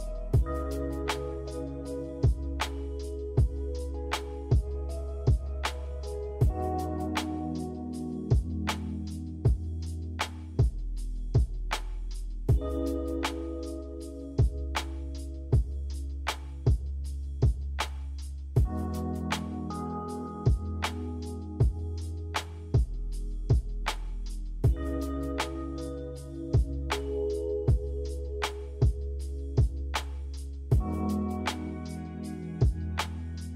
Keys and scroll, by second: 2.9-4.7 typing, 7.5 Delete, 22.9 z, 28.2 v.